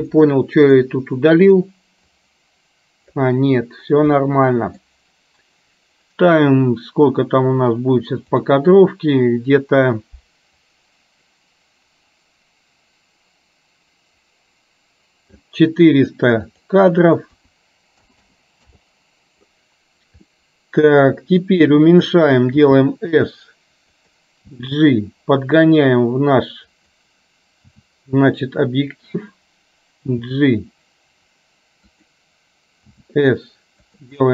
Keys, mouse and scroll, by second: 0.2 middle click, 2.2-3.3 drag, 4.3 middle click, 8.3 click, 10.8-15.5 drag, 16.6-18.8 drag, 18.2 KP_0, 20.3-22.1 middle drag, 22.6 s, 24.6 g, 27.7 s, 30.1 g, 33.0 s.